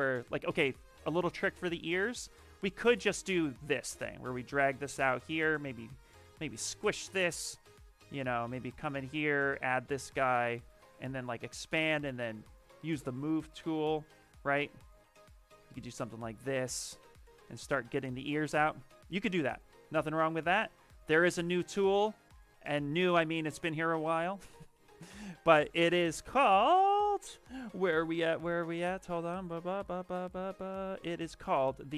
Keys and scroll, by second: 0.5 alt+Tab, 2.3 alt+Tab, 6.3 w, 8.0 z, 11.7-14.8 typing, 18.3 ctrl+z, 20.1 ctrl+shift+z, 21.3 ctrl+shift+z, 21.5 ctrl+shift+z, 22.1 ctrl+z, 22.4 ctrl+z, 25.8 t, 29.7 b, 30.2 c.